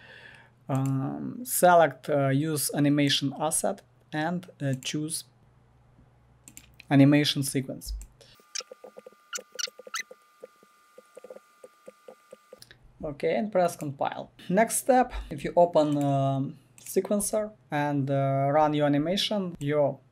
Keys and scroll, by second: 11.3 f, 12.0 w.